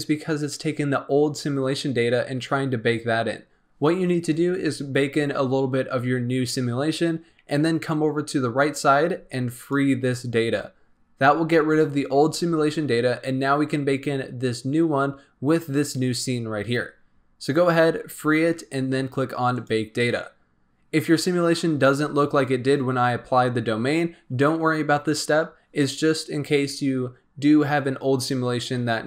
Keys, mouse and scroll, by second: 9.5-13.7 drag, 19.5-29.0 drag.